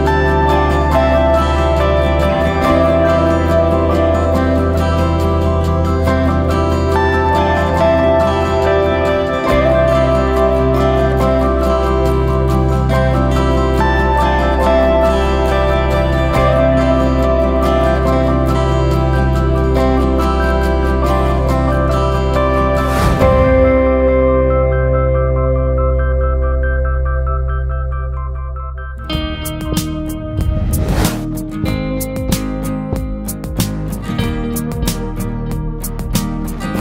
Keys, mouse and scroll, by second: 0.5 click, 0.7-1.7 scroll down 2, 1.7 KP_1, 2.1 scroll down 2, 2.3 scroll up 1, 2.4 shift+middle click, 3.0-3.5 scroll up 2, 4.0 click, 6.5 shift+middle click, 7.1 alt+a, 7.4-7.9 scroll up 1, 7.9 click, 8.9 g, 13.2-14.0 scroll down 3, 13.5 alt+a, 14.0 shift+middle click, 14.7 ctrl+r, 18.1-18.4 scroll up 2, 18.4-19.7 shift+middle drag, 19.7 click, 21.4 alt+a, 22.1-23.5 drag, 24.6 click, 28.8 shift+middle click, 29.7 alt+a, 30.2 click, 31.1 g, 35.1 alt+a, 35.5 click, 35.7 scroll down 1, 35.9 Tab, 36.2 scroll down 1, 36.4-36.8 middle drag.